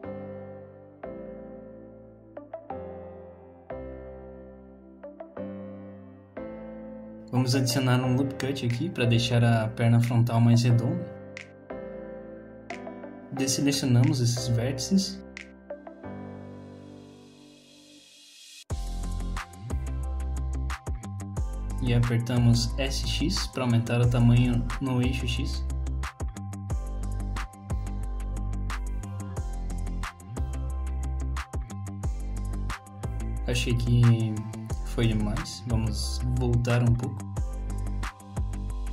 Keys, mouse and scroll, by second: 0.2 click, 0.6 middle click, 1.3 click, 1.8 click, 2.8 click, 3.1 click, 4.0 click, 4.8 middle click, 5.7 middle click, 6.0 scroll down 1, 6.2 shift+middle click, 6.6 middle click, 7.8 ctrl+r, 10.8 middle click, 12.4-13.3 scroll up 3, 13.3 shift+click, 13.7 shift+click, 14.1 middle click, 15.8 shift+click, 16.3 middle click, 17.1 shift+click, 17.5 middle click, 18.0 shift+click, 18.3 middle click, 18.6 scroll down 1, 18.8 middle click, 19.6 shift+click, 19.7 shift+click, 20.1 shift+click, 20.2 shift+click, 21.1 middle click, 21.8 shift+middle click, 22.8 middle click, 23.4 s, 27.7 middle click, 28.1-28.7 scroll up 2, 28.4 middle click, 28.7 click, 29.2 click, 30.2 click, 30.8 click, 31.7-32.2 scroll down 2, 31.8 middle click, 32.2 middle click, 33.1 shift+middle click, 33.1-34.1 scroll up 2, 34.7 click, 35.1 click, 37.9 click.